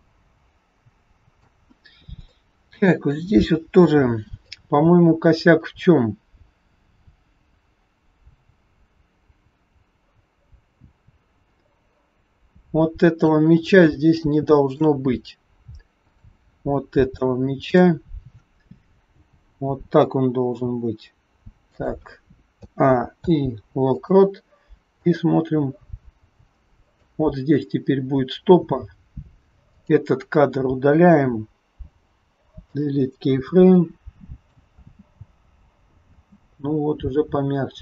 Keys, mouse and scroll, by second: 2.3 shift+middle click, 5.3 click, 13.7-14.2 scroll up 3, 14.2 shift+middle click, 16.1 click, 16.7 scroll up 1, 17.6 click, 19.1 g, 23.2 a, 23.2 i, 25.1 click, 29.7 click, 31.9 Delete, 33.7 click, 34.7 space, 36.1 space, 36.7-37.8 scroll down 6.